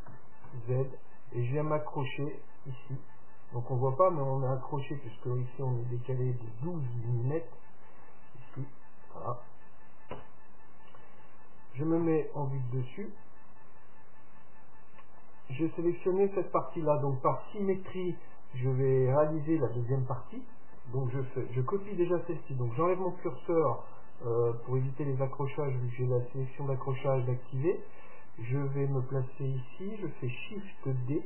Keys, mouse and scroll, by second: 0.3 g, 8.7-10.5 middle drag, 10.3 Tab, 12.2 KP_7, 13.5-15.2 middle drag, 15.4-17.3 right drag, 31.1 shift+d.